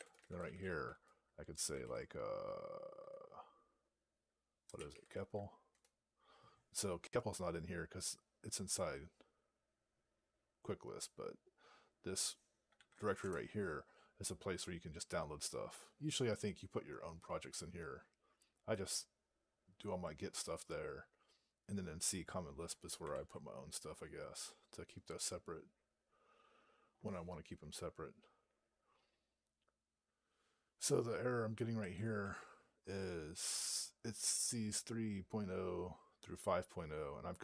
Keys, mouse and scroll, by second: 31.7 click.